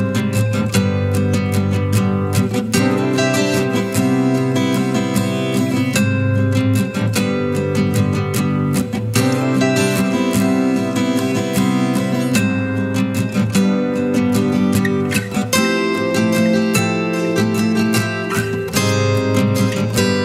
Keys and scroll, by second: 10.4 ctrl+t.